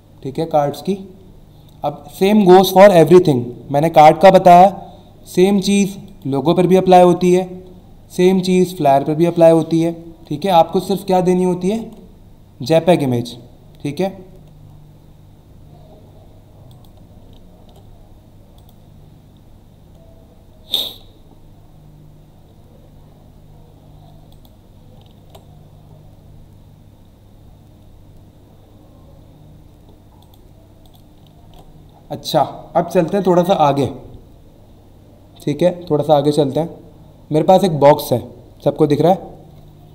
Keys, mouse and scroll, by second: 6.1 click, 7.0 ctrl+w, 11.4 ctrl+Num_Lock, 11.7 ctrl+w, 16.7 click, 17.6 ctrl+w, 18.6 click, 24.3 click, 25.2 ctrl+w, 30.2 click, 30.8 click, 31.1 click, 31.4 w.